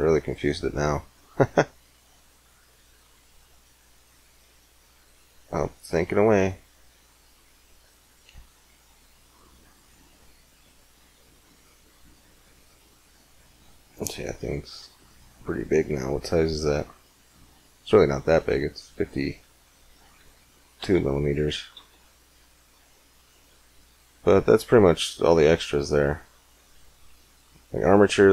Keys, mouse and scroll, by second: 2.3 middle click, 8.7-14.9 middle drag, 15.5-19.4 middle drag, 20.6 x, 21.6 shift+a.